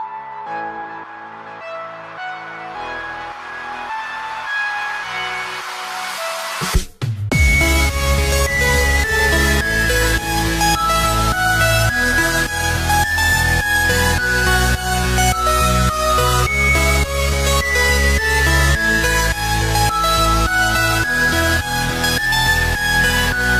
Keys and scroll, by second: 14.7 ctrl+-, 15.4 ctrl+=, 15.8 space, 20.3 space, 23.2 space.